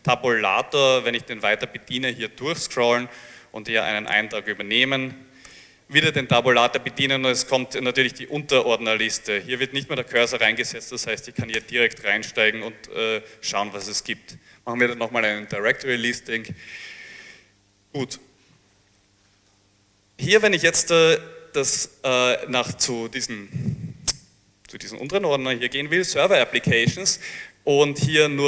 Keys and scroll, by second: 0.0 Tab, 0.9 Tab, 4.1 Return, 5.6 Tab, 8.6 Tab, 10.3 Tab, 11.7 Return, 13.7 l, 13.7 l, 13.9 Return, 18.8-21.6 typing.